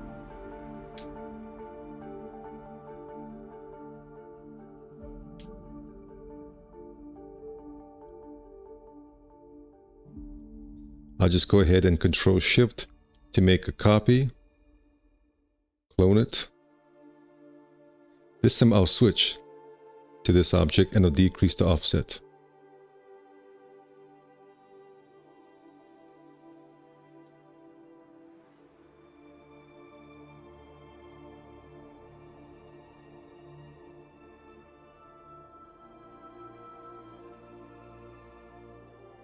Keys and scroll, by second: 0.9 F4, 2.1 1, 4.0 F4, 8.0 `, 9.0 space, 9.7 4, 10.4 w, 14.9 4, 15.3 q, 16.8 `, 23.1 5, 26.4 1, 27.3 x, 28.1 q.